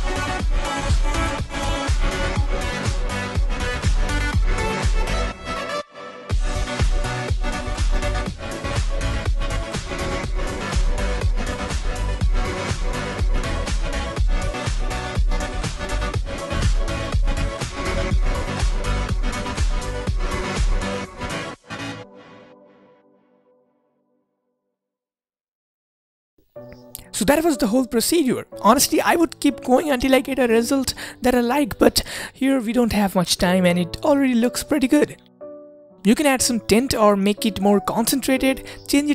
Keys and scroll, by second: 2.4 typing, 28.6-29.3 typing, 33.7-35.0 typing, 35.4 Return, 38.1-38.8 typing.